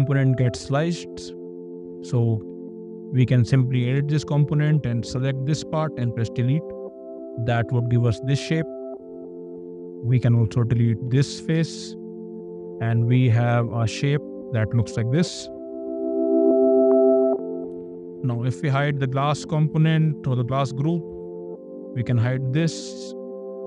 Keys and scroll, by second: 2.7 !, 6.0 d, 11.3 d, 11.5 Escape, 16.4 `, 22.2 ctrl+h.